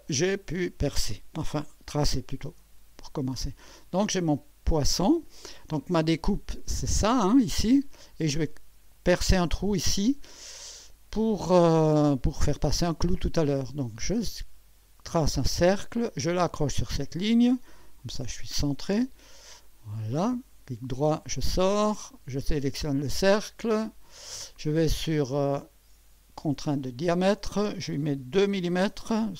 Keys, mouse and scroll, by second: 0.1-0.7 right drag, 3.4-3.7 scroll up 1, 4.1-5.2 right drag, 14.8 click, 17.8 click, 19.6 click, 20.9 right click, 22.2 click, 23.9 click, 26.7 click, 28.4 2.